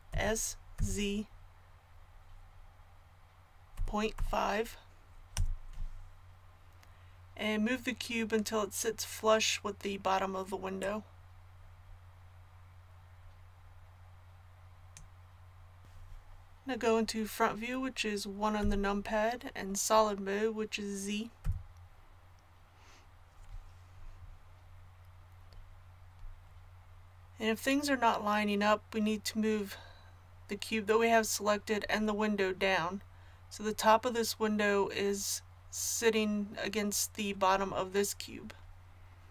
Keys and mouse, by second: 0.1 s, 12.7-18.6 drag, 18.6 KP_1, 21.4 z.